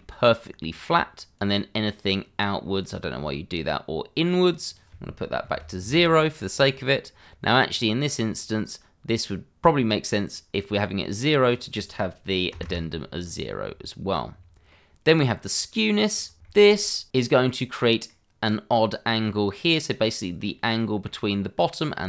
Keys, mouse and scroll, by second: 1.3 click, 5.4 0, 5.8 Return, 7.1 scroll down 1, 11.5 click, 12.5 0, 12.6 Return, 14.3 scroll down 1, 14.7 middle click, 16.0 click, 16.3 scroll down 1, 16.6 shift+middle click, 17.0 middle click, 20.4 scroll up 1, 20.8 middle click.